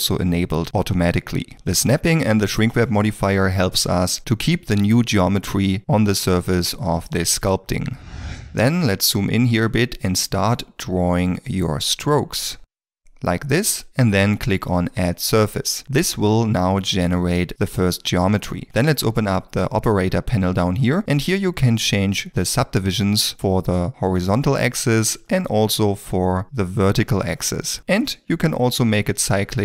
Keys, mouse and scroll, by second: 8.9 ctrl+middle click, 23.4 1, 23.9 Return.